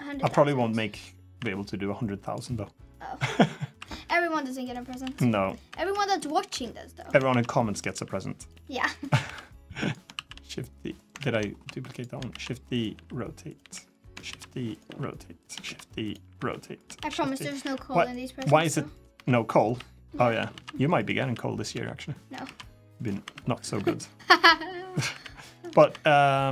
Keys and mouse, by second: 0.0 KP_7, 1.1 r, 3.8-9.9 typing, 10.9 ctrl+z, 11.3-25.6 typing.